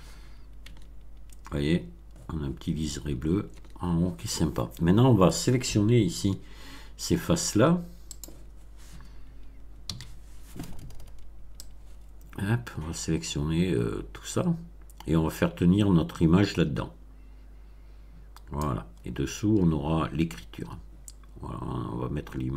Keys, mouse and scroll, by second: 0.6 Tab, 3.5 Tab, 6.1 a, 8.1 click, 9.8 b, 11.6-18.7 drag.